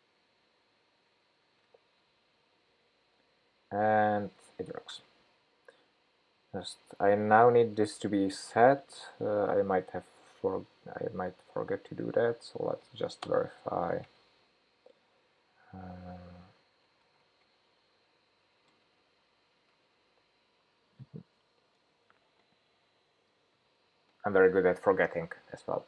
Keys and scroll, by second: 8.0 super+c, 19.3 super+v.